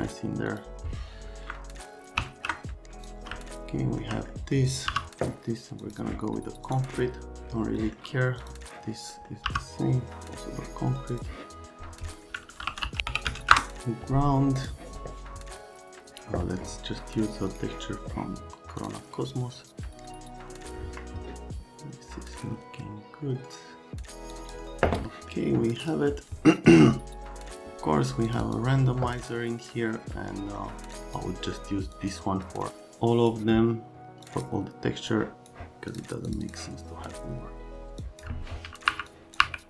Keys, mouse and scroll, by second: 0.5 click, 2.2 ctrl+s, 3.0 click, 3.4 alt+middle click, 4.4 middle click, 4.9 m, 5.9 click, 6.8 click, 7.8 middle click, 8.4 click, 9.2 right click, 9.5 n, 11.2 click, 12.3-13.9 typing, 14.5 click, 17.4 click, 18.8 click, 20.7 Escape, 24.3 click, 25.0 middle click, 25.8 click, 28.2 click, 28.3 click, 30.2 right click, 30.9 click, 31.9 click, 32.7 click, 34.2 click, 35.1 click, 35.9 click, 36.2 click, 36.4 click, 37.9 click, 38.8 Delete, 39.0 click, 39.3 Delete.